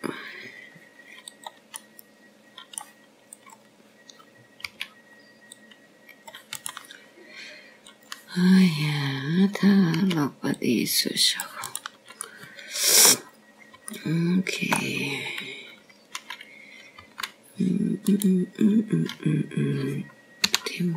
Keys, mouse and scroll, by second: 0.2 click, 1.1-1.9 scroll down 2, 1.9-2.5 scroll up 3, 2.5 scroll down 1, 3.4-4.0 scroll down 1, 4.0 scroll down 1, 4.1 click, 4.6 middle click, 6.2 click, 7.7 c, 10.7 click, 12.9 c, 15.1 shift+middle click, 16.1-16.8 scroll up 5, 16.8 shift+middle click, 17.9-18.9 scroll down 2, 18.9 scroll down 1, 19.9 g.